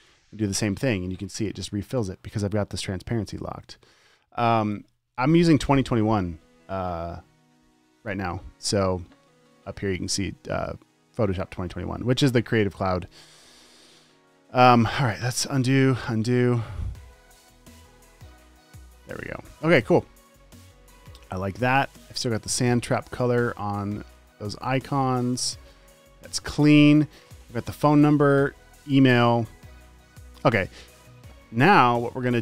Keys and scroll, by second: 0.3 alt+BackSpace, 14.5 super+z, 15.7 super+z, 18.5 super+z, 21.0 space, 22.2 space, 24.8 space, 25.3 space, 25.9 space, 27.3 super+s.